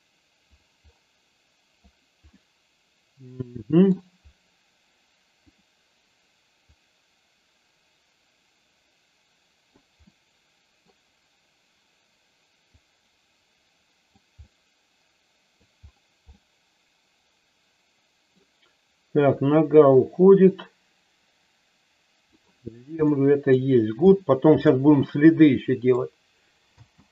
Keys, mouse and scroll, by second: 2.3-3.8 middle drag, 6.7-9.7 drag, 10.1 middle click, 12.7-14.1 drag, 14.4-15.7 middle drag, 16.3-18.3 middle drag, 19.9-22.2 drag, 23.0 middle click, 25.2 middle click, 26.6 space.